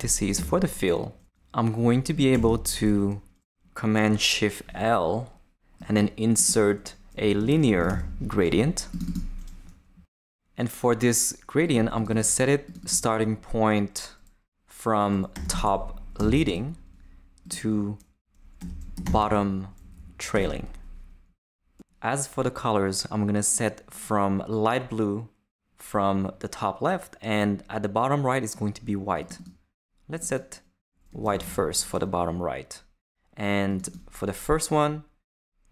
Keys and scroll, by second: 0.0 shift+Up, 0.3 Tab, 2.3 shift+super+l, 6.9-8.4 typing, 15.1-16.2 typing, 16.5 Return, 18.3-19.7 typing, 19.8 Down, 20.3 Return, 30.9-31.9 typing.